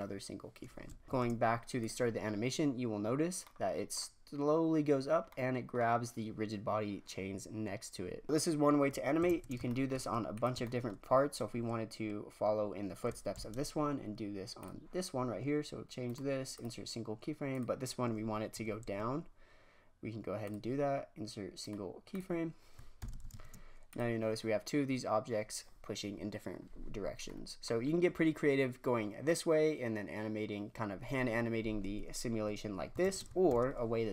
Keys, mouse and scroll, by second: 1.0 shift+space, 1.8 click, 3.4-8.2 middle drag, 9.3 shift+space, 9.6-10.3 shift+middle drag, 10.3 drag, 10.6-13.3 shift+middle drag, 13.3 shift+Left, 14.5-16.0 drag, 16.0-17.4 right drag, 17.4-18.5 drag, 18.5 g, 21.6-23.0 right drag, 23.0 shift+Left, 23.2 shift+space, 23.9 click, 27.3 middle click, 27.9-28.5 scroll down 1, 33.1 shift+space, 33.4 shift+Left.